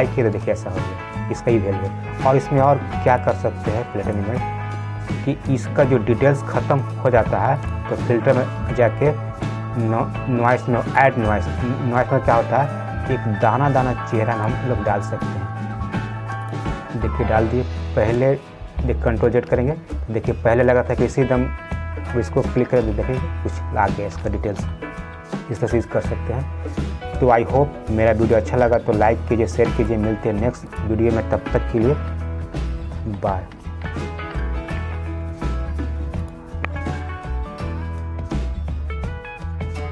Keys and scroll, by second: 19.8 ctrl+z, 22.8 ctrl+z.